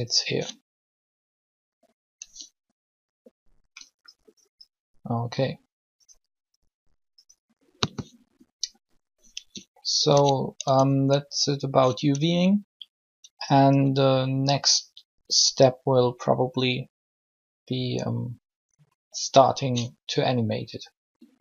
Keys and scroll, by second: 10.6 alt+shift+Tab.